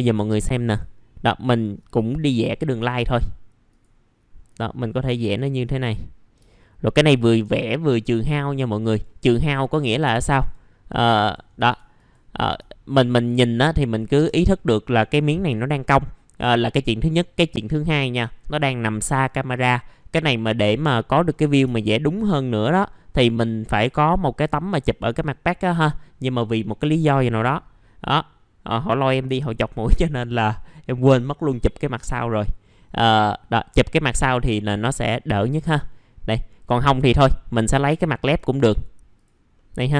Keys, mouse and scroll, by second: 0.6 click, 7.1 shift+click, 7.5 scroll down 1, 8.8 right click, 9.3-9.7 scroll down 1, 9.7 Delete, 9.9 middle click, 11.1 click, 11.5 Delete, 11.7 Delete, 12.0 click, 13.5 shift+click, 14.6 middle click, 15.0-21.2 scroll up 1, 21.2-21.6 scroll down 1, 21.8 alt+middle click, 22.4 middle click, 22.9 scroll up 1, 23.7 click, 28.7-34.0 scroll up 1, 35.8 middle click, 36.3-37.0 scroll up 1, 37.7-38.3 scroll down 1, 38.3 right click, 39.1 click, 39.5 middle click.